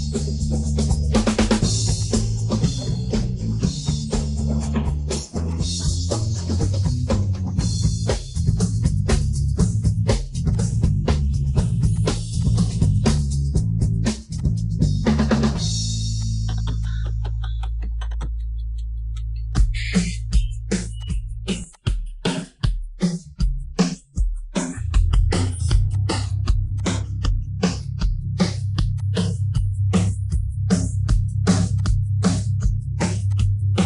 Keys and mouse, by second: 2.7 click, 3.8-5.0 drag, 5.7-6.2 middle drag, 6.8 click, 7.3 middle click, 8.0 KP_1, 8.7 KP_3, 9.6-10.2 shift+d, 10.5 click, 10.8 click, 11.2 middle click, 12.4 click, 13.1 click, 13.8 KP_1, 14.3-14.7 drag, 15.1-15.5 middle drag, 16.2 click, 16.8 click, 17.9 shift+middle click, 18.3 shift+middle click, 18.8 KP_1, 19.4 KP_3, 20.4 shift+middle click, 20.9 click, 21.7 click, 22.3 shift+middle click, 23.7 click, 24.4 shift+middle drag, 25.0 shift+middle click, 25.3 shift+middle drag, 25.9 click, 26.7-27.2 drag, 27.6 click, 28.9 click, 29.5-30.5 drag, 32.2 click.